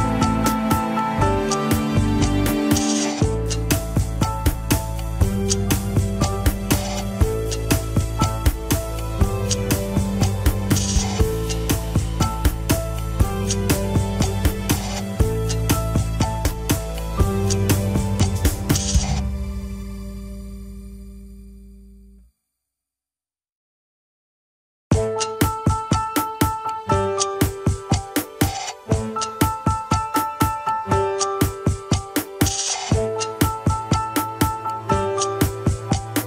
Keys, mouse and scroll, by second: 2.7-6.5 drag, 6.5-7.6 middle drag, 7.6-8.7 drag, 8.7 middle click, 9.3 click, 10.3 middle click, 10.7 click, 11.3 middle click, 12.0 click, 12.5 KP_1, 12.9 ctrl+Tab, 13.4 click, 14.2 ctrl+Tab, 14.4 scroll down 1, 16.3 a, 16.6 alt+r, 17.0 alt+g, 17.4 click, 18.3 r, 19.7-20.4 scroll up 4, 20.4 click, 21.0 shift+middle click, 21.3 shift+scroll up 1, 21.7 r, 23.0 click, 23.9 r, 27.3-27.7 scroll down 4, 27.7 ctrl+Tab, 27.7 scroll up 3, 28.0 shift+drag, 28.3 ctrl+Tab, 28.8-29.3 scroll up 3, 29.3 alt+z, 30.7 ctrl+click, 30.7 alt+z, 30.9 middle click, 31.5 alt+z, 32.3 ctrl+click, 32.4 alt+z, 32.6-34.3 middle drag, 34.3 click, 35.1 f, 35.8 click.